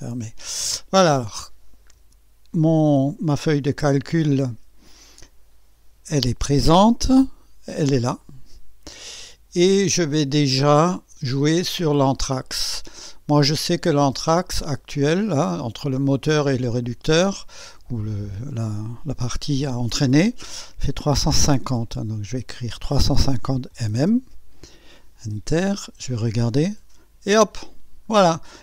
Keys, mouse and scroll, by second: 0.5 scroll up 2, 0.9 scroll down 2, 1.4-2.0 drag, 2.0 KP_2, 3.3 KP_1, 4.4 KP_6, 5.4 scroll up 1, 7.6 typing, 8.2 click, 16.8 click, 21.6-23.7 typing, 25.3 Return, 26.1 typing, 26.5 click, 28.3 scroll down 1.